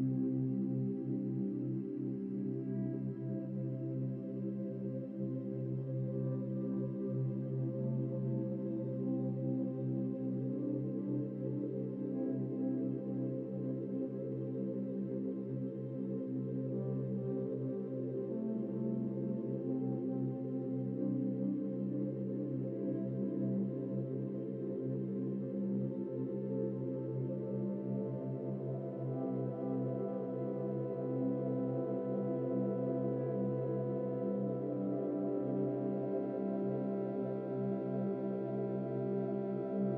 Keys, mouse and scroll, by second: 0.5-0.9 scroll down 2, 0.9 click, 3.2-3.6 scroll down 4, 3.6-3.9 scroll up 3, 4.1 click, 4.3 middle click, 5.0-6.4 drag, 7.6-9.2 middle drag, 9.4-9.8 scroll up 4, 10.8 scroll up 1, 11.0-12.2 middle drag, 12.2-13.0 drag, 13.6-15.7 middle drag, 17.5 scroll down 2, 18.5 click, 20.7-21.9 middle drag, 21.9 click, 22.1-24.0 middle drag, 24.0 KP_0, 24.4 KP_0, 24.8 scroll down 4, 25.7-26.2 scroll up 2, 30.0 click, 32.6-33.7 drag, 33.7-34.1 scroll down 8, 34.4-35.7 shift+middle drag, 35.7-36.9 scroll up 5, 36.9-37.9 shift+middle drag, 37.9-39.6 drag.